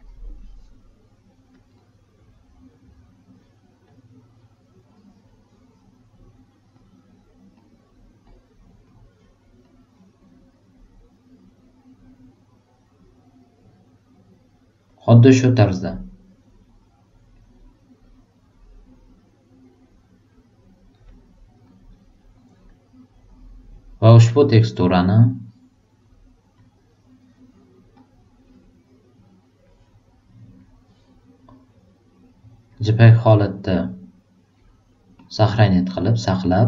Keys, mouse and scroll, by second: 0.0 super+click, 1.5 super+click, 2.7 super+click, 3.8 super+click, 4.8 super+click, 6.5 super+click, 7.5 super+click, 8.3 super+click, 8.8 super+click, 9.6 super+click, 25.2 super+click, 26.5 super+click, 27.9 super+click, 30.5 super+click, 32.7 super+click, 35.1 super+click, 36.4 super+click.